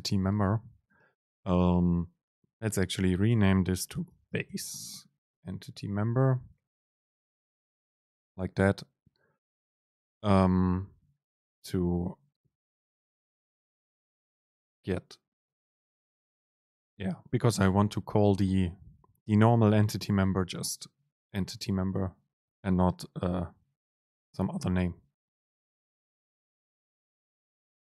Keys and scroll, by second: 5.5 Home.